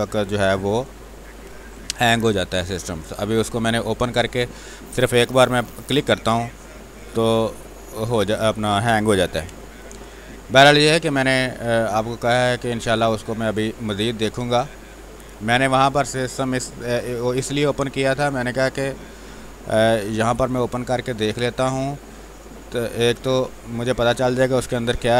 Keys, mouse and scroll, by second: 1.0 r, 1.5 space, 1.7-5.7 alt+drag, 5.7 space, 5.9 click, 6.2 space, 7.1-9.1 drag, 9.1 b, 9.5 space, 9.8-13.9 ctrl+drag, 13.9 space, 14.2 click, 14.4 space, 14.8 click, 14.9 space, 15.2 space, 16.2-20.0 drag, 20.0 space, 20.4 alt+click, 24.7 r, 24.9 click.